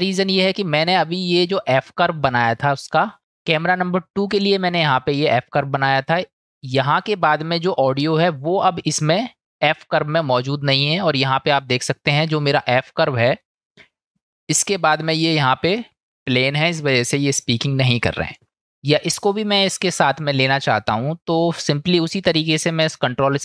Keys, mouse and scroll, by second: 2.7 click, 11.6 middle click, 12.1 middle click, 12.8 middle drag, 13.3 middle click, 20.5 click.